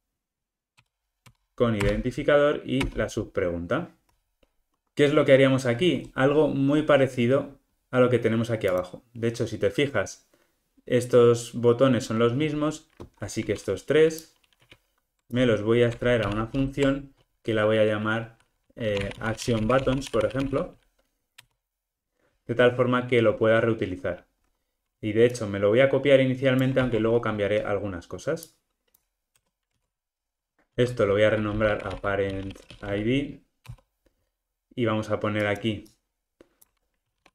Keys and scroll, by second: 0.8 Return, 16.2 alt+super+m, 26.8 super+c, 31.2 shift+F6.